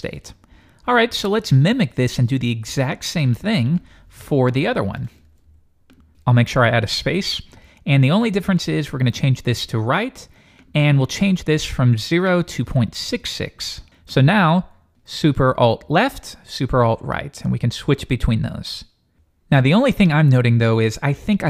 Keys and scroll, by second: 15.8 alt+super+Left, 17.0 alt+super+Right, 17.5 alt+super+Left, 17.7 alt+super+Right, 18.1 alt+super+Left, 18.3 alt+super+Right.